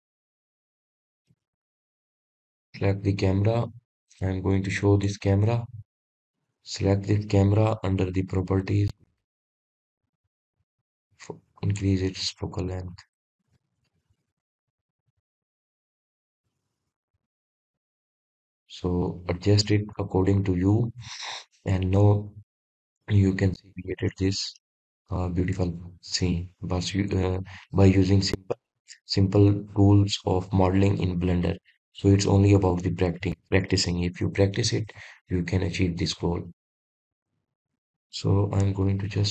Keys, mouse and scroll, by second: 0.1-6.1 middle drag, 6.3-9.3 shift+middle drag, 9.3-9.9 scroll up 1, 9.9 scroll up 1, 10.1-14.2 shift+middle drag, 14.2 click, 27.1 click, 32.0 click, 33.6 click, 34.5 click, 37.3-38.6 drag.